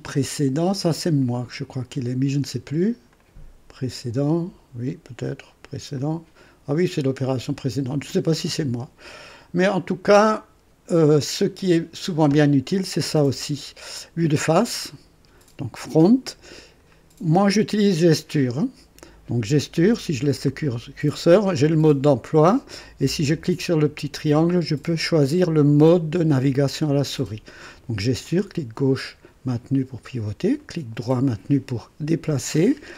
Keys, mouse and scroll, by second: 3.1 click, 5.9 click, 7.6 click, 14.3 click, 22.8 click, 23.7 click, 27.6 click, 28.3-30.5 drag, 30.6-32.9 right drag.